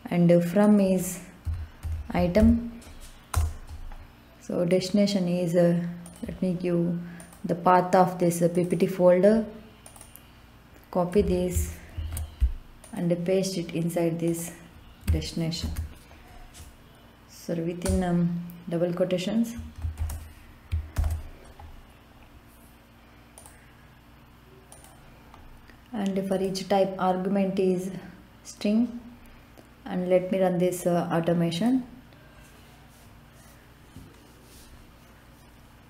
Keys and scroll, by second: 1.2-2.9 typing, 3.3 Return, 11.9 ctrl+c, 15.5 ctrl+v, 17.8 BackSpace, 18.5 BackSpace, 19.9 shift+', 20.9 ctrl+v.